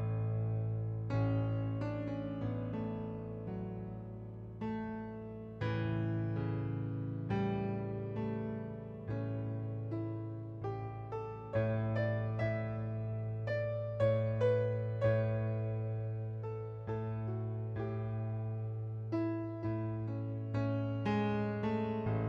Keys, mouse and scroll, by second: 0.8 click, 3.2 right click, 3.9 click, 4.8 click, 7.3 click, 7.8 right click, 9.2 click, 11.2 click, 12.7 click, 13.8 KP_2, 13.9 Return, 14.8 click, 16.4 middle click, 17.3 click, 19.6 click, 20.8 click.